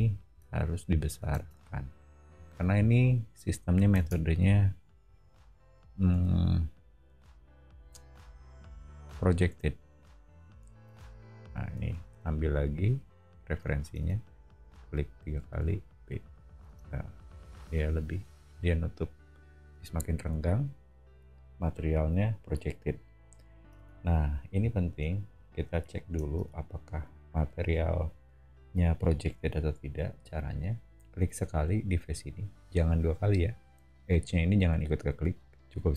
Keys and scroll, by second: 1.3 space, 2.3 o, 3.9 space, 6.1 s, 10.9 space, 11.7 b, 13.9 space, 15.5 b, 16.6 space, 17.1 Escape, 17.8 o, 23.7 space, 24.5 o, 26.4 space.